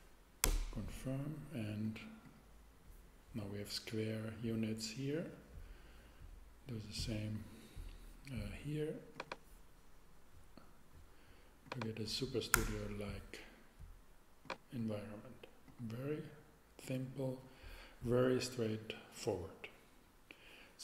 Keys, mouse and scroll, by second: 0.4 Return, 3.4 middle click, 9.1-11.2 drag, 12.5 Return, 18.2 middle click.